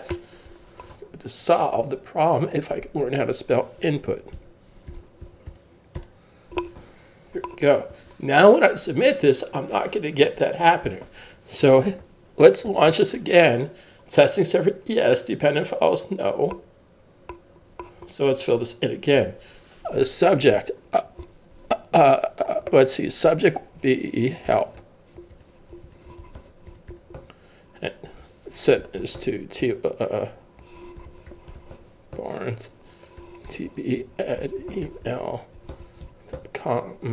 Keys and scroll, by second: 4.1-7.0 typing, 7.9 super+s, 12.7 super+F12, 24.5-29.7 typing, 30.8-37.1 typing, 33.2 Tab.